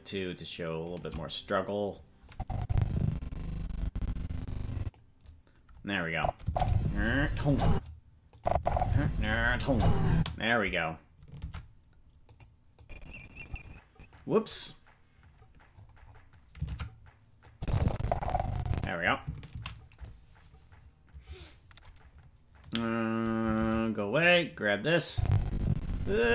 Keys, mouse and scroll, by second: 2.3-5.0 drag, 6.1 click, 6.4 space, 7.7 space, 8.3-10.2 drag, 8.5 space, 10.1 space, 11.4 ctrl+Tab, 12.3 click, 12.8-14.1 drag, 15.7-16.3 scroll down 11, 16.7 ctrl+Tab, 17.5-18.8 drag, 21.8 ctrl+s, 23.6 ctrl+Tab, 24.3 right click, 25.1-26.3 drag.